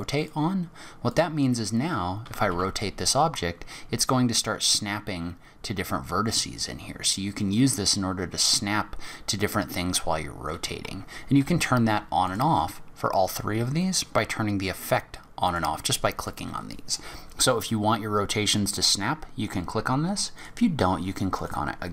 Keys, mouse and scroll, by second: 2.3 r, 12.3 click.